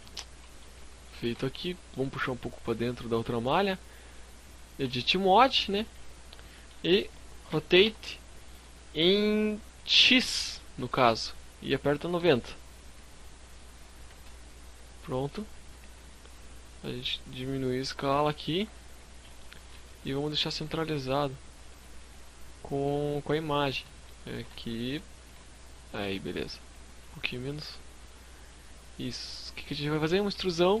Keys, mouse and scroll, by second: 0.1-0.5 shift+scroll up 5, 0.1 g, 2.2 shift+click, 4.0 Tab, 6.5 r, 14.6 scroll down 2, 14.8 s, 17.4 click, 17.7-18.5 scroll up 6, 18.4 shift+middle click, 18.9 g, 20.6 shift+click, 20.9 s, 22.7 shift+click, 23.3 g, 24.1 shift+click, 25.6 s, 26.6 shift+click, 27.1 click, 28.4-28.9 scroll down 6, 29.0 shift+middle click, 29.0 shift+scroll up 1, 29.6 scroll down 1, 29.8 shift+middle click.